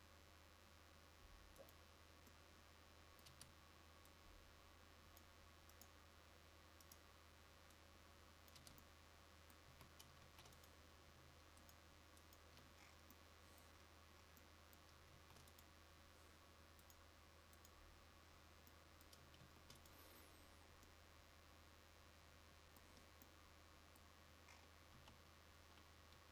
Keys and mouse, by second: 3.4 Tab, 8.8 Tab, 9.8 a, 10.3 ctrl+s, 15.3 ctrl+s, 19.5 ctrl+s, 25.1 KP_0.